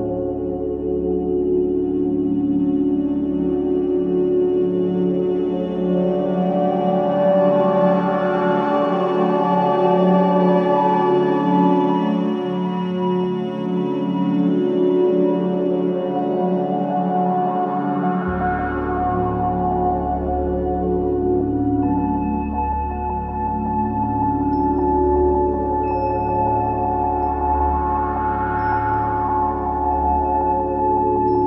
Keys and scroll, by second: 1.2 0, 1.3 Return, 1.7 0, 1.8 Return, 2.3 3, 14.3 4, 23.9 F2, 29.0 3.